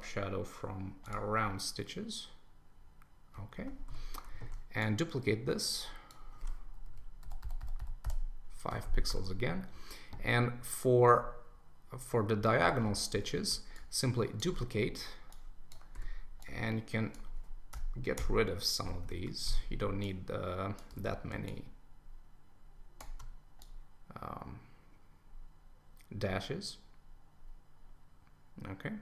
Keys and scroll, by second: 3.5 super+s, 6.8 Left, 7.2 Right, 8.8 super+s, 19.0 super+Return, 20.9 super+t.